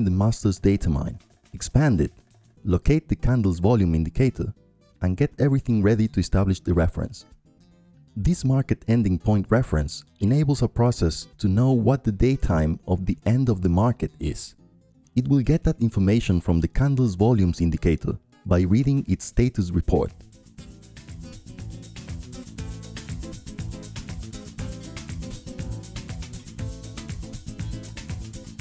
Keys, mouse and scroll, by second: 2.2-3.3 drag, 4.6-5.7 drag, 7.0-9.2 drag, 9.8 click, 11.0 click, 12.4 click, 15.6-16.7 drag, 17.1-19.1 drag, 19.4-21.1 drag, 21.3-22.6 drag, 22.9-24.0 right drag, 25.7-26.8 drag, 27.0-28.6 drag.